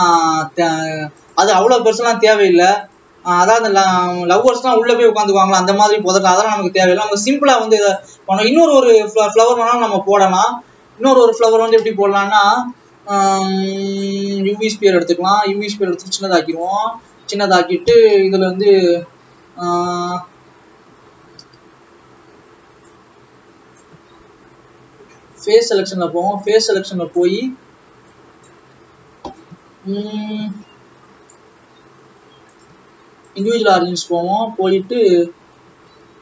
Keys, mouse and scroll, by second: 0.9 click, 1.8 click, 2.9 click, 6.4 click, 8.1 click, 9.1 click, 10.8-11.9 scroll up 6, 14.0 shift+a, 14.4 scroll up 1, 14.7 scroll down 2, 15.7 s, 16.8-17.7 scroll up 7, 17.7-18.1 scroll down 2, 18.1 Tab, 18.4-18.7 scroll up 2, 18.7-22.4 scroll down 2, 22.9 Left, 24.0-24.6 scroll up 4, 24.6-25.7 scroll down 2, 25.7 click, 27.4-28.1 scroll down 1, 28.1 click, 28.7-29.6 scroll up 1, 29.7 scroll up 1, 30.0-33.4 scroll down 2, 33.4-34.8 drag, 34.8 e.